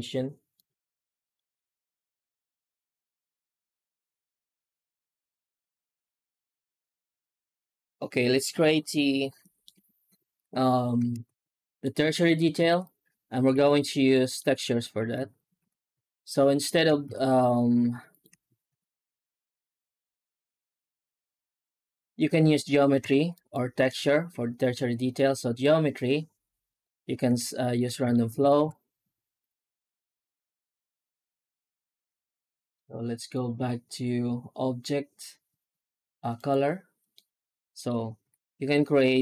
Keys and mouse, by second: 1.2 middle click, 2.2-5.4 drag, 6.0 z, 8.8-9.5 middle drag, 11.0 ctrl+space, 11.5 middle drag, 12.0 shift+middle drag, 12.5 ctrl+s, 14.0 middle drag, 14.4 right click, 14.7 Tab, 15.8 3, 17.0 ctrl+s, 21.9 right click, 23.2 ctrl+shift+right click, 24.6 Tab, 25.0-25.5 middle drag, 25.9 Tab, 26.5 right click, 27.5 ctrl+shift+right click, 28.0 shift+middle click, 28.2 Tab, 28.5 shift+q, 33.3-36.9 drag, 37.0 middle click, 38.1 F9.